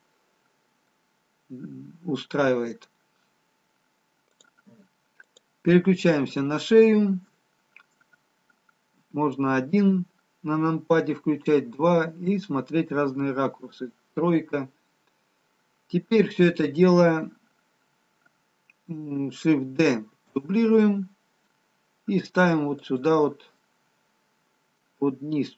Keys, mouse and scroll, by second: 1.2 scroll up 4, 2.6-3.0 scroll down 2, 7.7 click, 7.7-9.1 scroll down 2, 9.1 KP_1, 11.0 KP_2, 12.4 KP_3, 14.3-14.6 scroll up 1, 15.9-17.4 scroll down 1, 21.1 shift+d, 24.0 middle click.